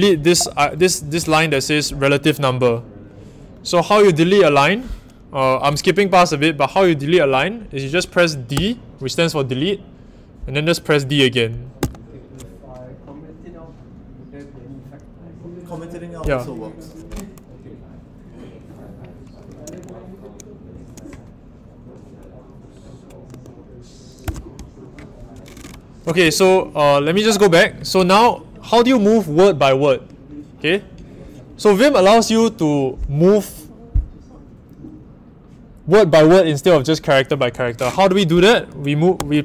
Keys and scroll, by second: 0.0-1.7 typing, 8.5 d, 9.4 d, 11.8 d, 23.3 w, 24.2 Return, 26.2-28.5 typing, 39.2 w.